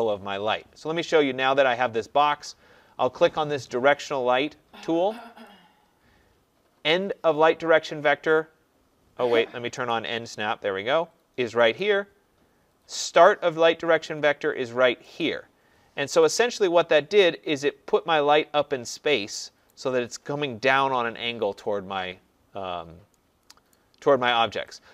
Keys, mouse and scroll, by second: 5.4 click, 9.9 click, 11.8 click, 15.2 click, 15.8 middle click, 15.8 middle click, 19.7 right click, 23.7 right click, 24.7 click.